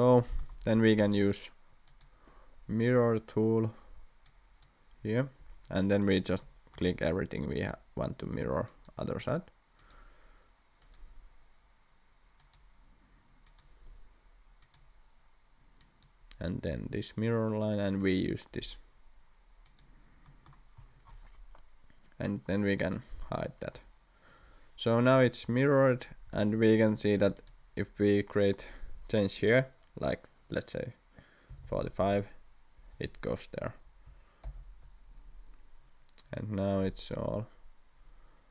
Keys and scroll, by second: 0.7 Escape, 26.2 Escape, 26.5 Escape, 31.2-32.1 typing, 34.4 ctrl+z.